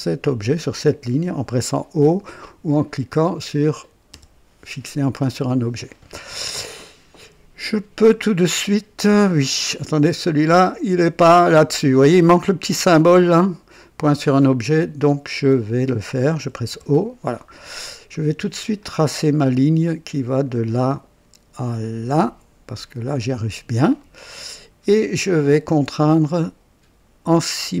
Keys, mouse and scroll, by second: 0.0 click, 4.0 o, 10.6 click, 15.2 click, 16.6 o, 18.7 click, 20.4 click, 23.0 click, 23.9 right click, 25.3 click, 25.6 typing, 27.7 click.